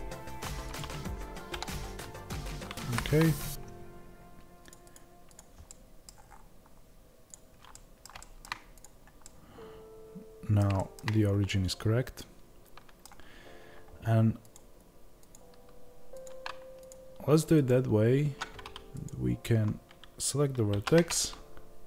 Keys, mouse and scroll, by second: 4.5 click, 5.6-7.6 middle drag, 6.0 scroll down 1, 7.6 click, 7.6-8.9 middle drag, 8.9 click, 9.2-14.6 middle drag, 11.1-11.4 scroll up 1, 14.6 click, 18.2 Tab, 19.0 click.